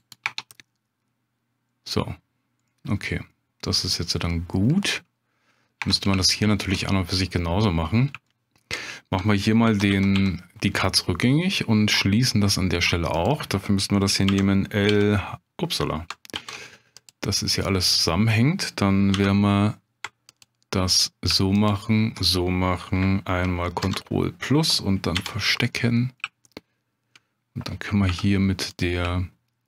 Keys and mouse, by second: 0.0-1.3 right drag, 1.3 Tab, 2.7 click, 4.1-4.7 drag, 5.8 Tab, 6.2 shift+click, 6.9-8.0 drag, 8.3 shift+click, 9.7 ctrl+z, 9.9 ctrl+z, 11.2 click, 12.6 click, 14.3 l, 14.9 h, 16.4 ctrl+z, 17.0 click, 19.1 3, 21.6 alt+shift+click, 23.8 ctrl+KP_Add, 25.2 h, 25.7 click, 26.5 shift+click, 28.1 1, 28.8 click.